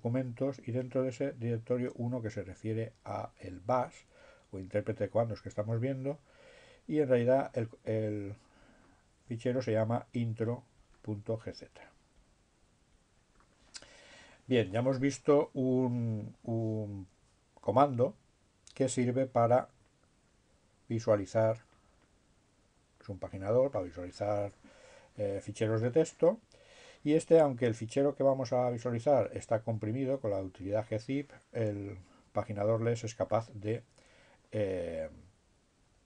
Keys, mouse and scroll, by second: 0.4-2.4 drag, 2.8 click, 5.0-6.0 drag, 6.5-7.9 drag, 8.4-9.4 drag, 9.6 click, 10.2 click, 10.9 click, 12.2 click, 13.0 click, 18.6-20.4 drag, 20.5-21.5 drag, 28.0-29.0 drag, 32.6-33.8 drag.